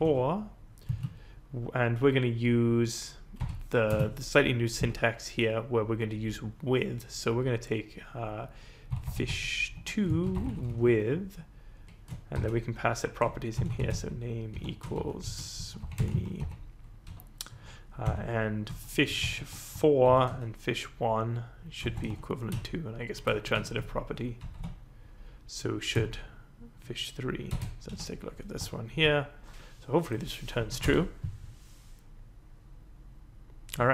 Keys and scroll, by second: 0.0-0.9 typing, 3.4 =, 3.9 space, 8.6-11.0 typing, 12.3-16.9 typing, 17.0 End, 18.0 ;, 18.6 Up, 19.2 shift+Home, 20.0 ctrl+c, 20.2 Down, 21.9 Return, 22.0 ctrl+v, 22.5 Left, 23.0 Left, 23.0 Left, 23.1 Left, 24.3 Right, 24.5 Left, 25.9 Left, 26.3 Left, 26.5 Left, 26.5 Left, 26.7 Left, 27.4 BackSpace, 27.8 4, 28.9 ctrl+s, 30.6 Up, 30.8 Return.